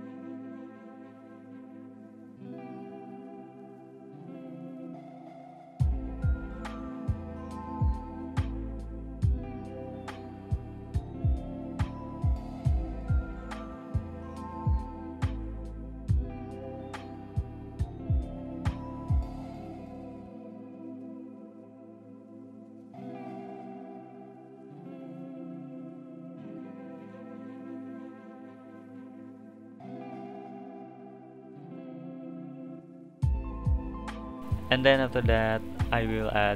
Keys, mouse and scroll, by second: 1.9-7.4 drag, 11.2-12.4 drag, 12.4 BackSpace, 12.4 BackSpace, 18.8 click, 19.3 click, 20.3 BackSpace, 20.4 BackSpace, 21.4 0, 21.5 0, 23.4 click, 23.5 click, 24.8 n, 25.3 n, 25.7 click, 34.3-34.9 middle drag, 34.9 click, 35.8 click.